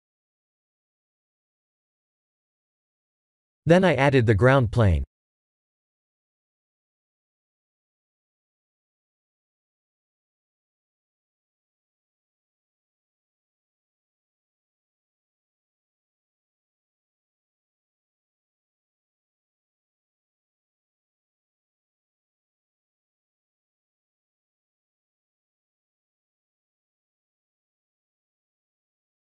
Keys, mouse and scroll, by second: 0.6 middle click, 2.1 middle click, 2.6 middle click, 4.8 click, 6.0 click, 6.6 click, 7.2 shift+a, 8.7 s, 11.1-11.6 scroll down 10, 12.4 middle click, 13.0 scroll down 3, 13.4 g, 14.4-14.7 scroll down 3, 14.7 g, 15.9 s, 17.7 s, 19.1 middle click, 20.5 KP_0, 21.8 middle click, 22.5 scroll up 4, 22.9-24.0 scroll down 14, 24.3 middle click, 25.1-27.4 scroll up 19, 27.4 middle click, 28.6 shift+middle click.